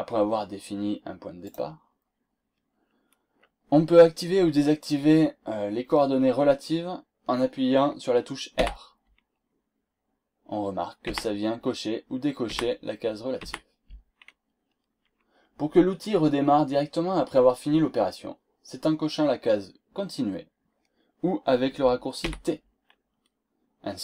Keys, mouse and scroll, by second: 1.4 click, 8.5 r, 11.0 r, 12.5 r, 13.4 r, 22.2 t.